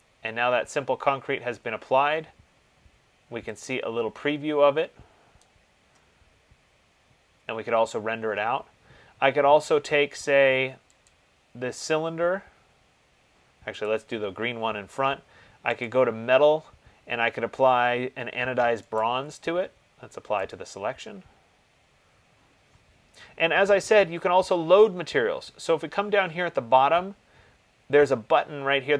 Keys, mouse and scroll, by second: 5.6 click, 11.3 click, 14.0 click, 16.0 click, 19.2 right click, 20.7 click.